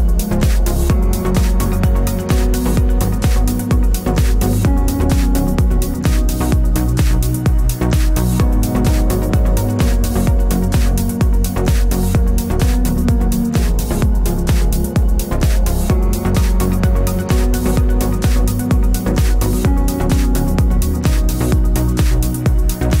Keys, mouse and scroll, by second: 3.5 a, 3.9 l, 5.7 Tab, 5.9-7.2 middle drag, 7.2 click, 7.4 Tab, 7.9 l, 9.1-9.5 scroll up 1, 14.4 alt+click, 14.9 alt+shift+click, 15.4-17.8 drag, 16.6 s, 19.2 middle click, 19.2 s, 20.0 click, 20.3 Tab, 20.3-23.0 middle drag, 20.6 scroll down 1, 21.7 ctrl+s.